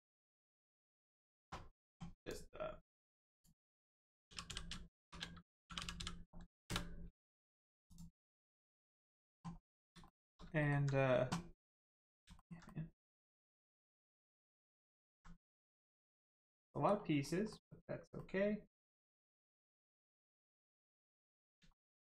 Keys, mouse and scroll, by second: 0.1 click, 3.3 click, 5.7 g, 5.7 u, 5.9 n, 7.9 click, 9.6 middle click, 10.0 shift+middle click, 10.4 alt+middle click, 10.6 alt+middle click, 11.6 middle click, 12.3 alt+middle click, 12.7 middle click, 12.7 middle click, 14.3 shift+middle click, 14.6 middle click, 15.0 alt+middle click, 15.7 middle click, 16.3 shift+middle click, 16.5 shift+scroll down 1, 16.6 middle click, 17.2 scroll down 1, 17.5 middle click, 21.7 middle click.